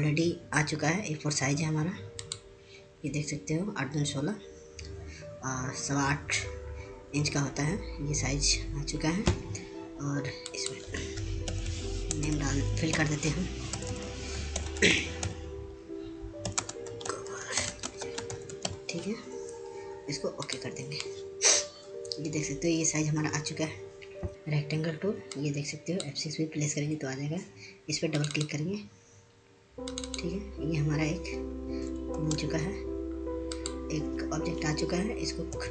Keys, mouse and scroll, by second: 2.6 ctrl+click, 10.9 ctrl+click, 11.9-19.7 typing, 21.1 click, 26.4-32.6 drag, 33.3 ctrl+space, 34.7 click.